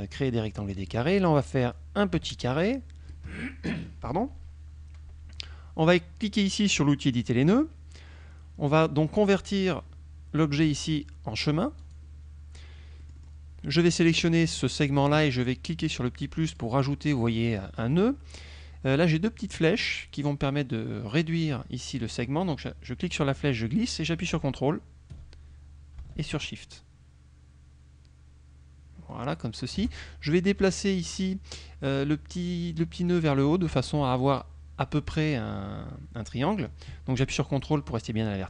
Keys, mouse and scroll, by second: 1.0 click, 1.8-3.4 drag, 7.2 click, 11.9 click, 13.1 click, 14.0 click, 16.6 click, 17.4 click, 21.6-30.0 drag, 31.2 click, 33.2-38.4 drag.